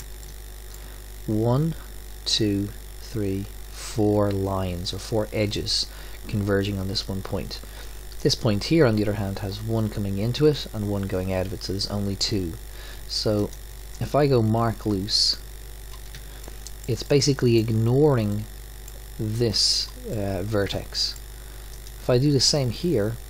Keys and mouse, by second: 0.8-2.5 middle drag, 7.3 middle click, 8.2-10.5 drag, 10.5-11.6 middle drag, 13.4-16.6 drag, 16.4 middle drag, 16.7 click, 17.1 click, 18.3 middle click, 22.3-23.2 drag.